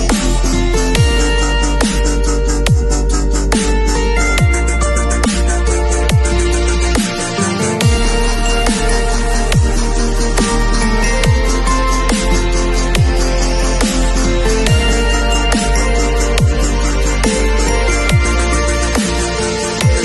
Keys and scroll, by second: 6.3 super+a, 6.7 shift+super+c, 7.0 shift+super+v, 7.8 super+v.